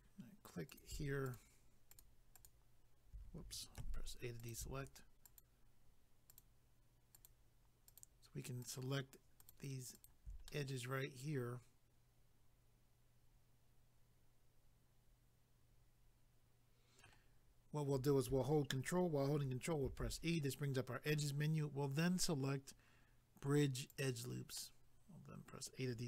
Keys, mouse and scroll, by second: 0.0 click, 0.7 click, 0.8 click, 1.3 shift+click, 1.3 shift+click, 1.9 shift+click, 2.0 shift+click, 2.3 shift+click, 2.4 shift+click, 3.8 a, 4.4 click, 5.2 shift+click, 6.3 shift+click, 7.1 shift+click, 7.9 shift+click, 8.6 shift+click, 8.7 shift+click, 9.4 shift+click, 9.5 shift+click, 9.9 shift+click, 10.0 shift+click, 10.5 middle click, 19.9 ctrl+e, 23.9 click, 24.0 click, 24.6 middle click.